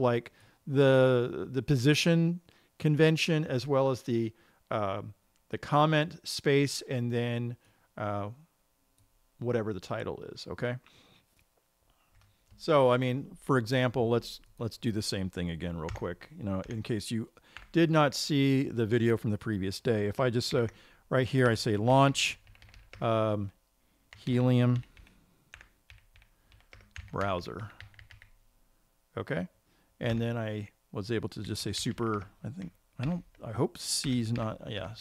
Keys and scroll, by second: 16.4 Return, 21.1 typing, 30.0 typing, 30.6 Return.